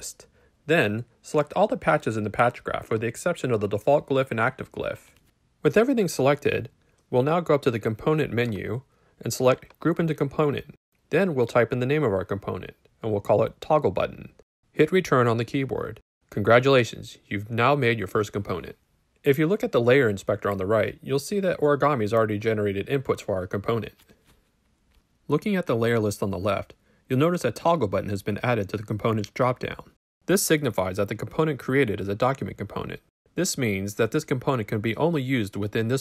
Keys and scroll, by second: 11.4-14.5 typing, 14.6 Return.